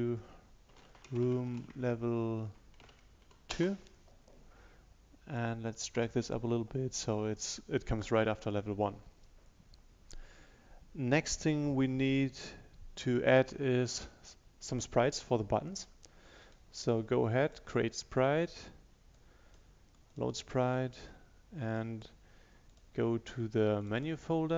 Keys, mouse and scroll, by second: 0.6-3.3 typing, 3.6 Return, 5.5-7.4 drag, 16.6 right click, 17.5 click.